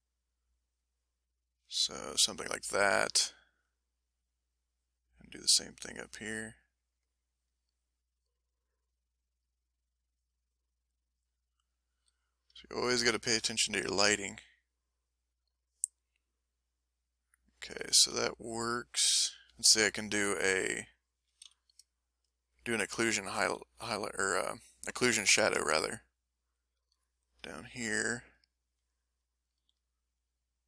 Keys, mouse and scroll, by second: 1.4-2.9 drag, 3.0 middle click, 4.1-6.0 drag, 6.5-8.9 drag, 19.7 ctrl+middle click, 21.4 m, 21.9 ctrl+middle click, 22.5 ctrl+middle click, 23.8 l, 26.8 s, 27.7 click, 28.4 click, 29.5 f, 29.9 click, 30.5 click.